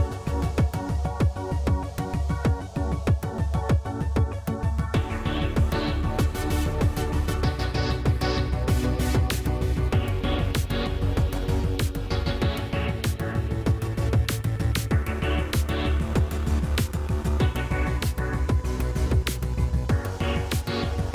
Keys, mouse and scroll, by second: 0.3 shift+d, 1.4 g, 6.7-8.3 drag, 10.2 a, 10.4 a, 10.8 a, 11.6 b, 13.7 m, 15.5 a, 16.9 shift+s, 19.5 click, 20.9-21.1 middle drag.